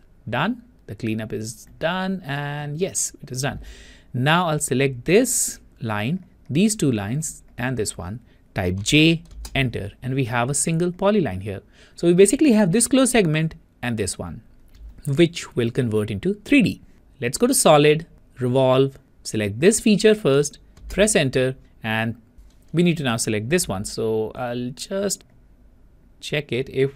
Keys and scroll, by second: 21.1 Return.